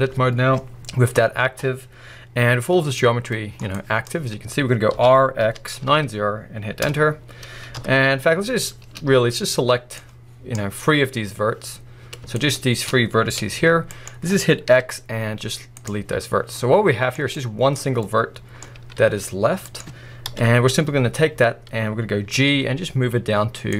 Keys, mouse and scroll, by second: 3.0 scroll down 1, 3.3 middle click, 3.7-5.0 drag, 5.0 r, 6.9 Return, 7.7 KP_1, 9.9 click, 12.4 shift+click, 13.4 g, 14.1 right click, 14.7 x, 16.6 middle click, 17.2 scroll up 1, 17.4 click, 18.0 middle click, 18.7 g, 19.8 right click, 20.3 KP_1, 22.0 scroll up 1, 22.3 g.